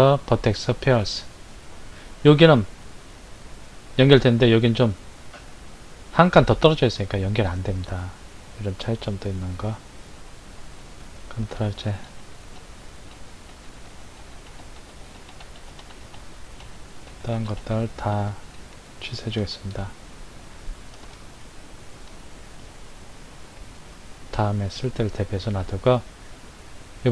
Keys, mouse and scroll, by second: 11.5 ctrl+z, 12.1 ctrl+z, 12.5 ctrl+z, 13.1 ctrl+z, 13.5 ctrl+z, 13.9 ctrl+z, 14.2 ctrl+z, 14.4 ctrl+z, 14.7 ctrl+z, 15.0 ctrl+z, 15.3 ctrl+z, 15.6 ctrl+z, 15.8 ctrl+z, 16.0 ctrl+z, 16.6 ctrl+z, 17.1 ctrl+z, 17.3 ctrl+z, 17.5 ctrl+z, 18.1 ctrl+z, 18.5 ctrl+z, 19.2 ctrl+z, 20.1-20.5 scroll down 2, 21.1-25.6 shift+middle drag, 26.1-27.1 middle drag.